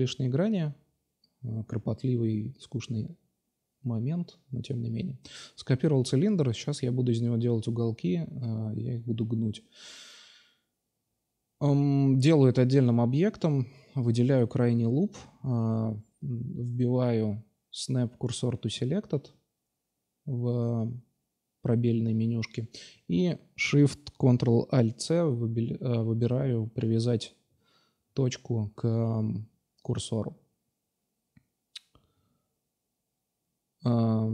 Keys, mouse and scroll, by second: 0.5 KP_Divide, 0.9-1.5 middle drag, 1.7 middle drag, 1.9 middle click, 3.1 shift+d, 5.5 p, 6.2 Tab, 6.7 Tab, 7.6 a, 7.8 a, 8.2 s, 10.2 ctrl+r, 13.2 2, 13.9 ctrl+c, 15.0 space, 16.6 BackSpace, 17.9 BackSpace, 23.3 Tab, 25.7-27.5 drag, 28.5 click, 30.2 ctrl+a, 30.2 click, 30.9-32.3 drag, 32.7-34.0 middle drag, 34.0 shift+d.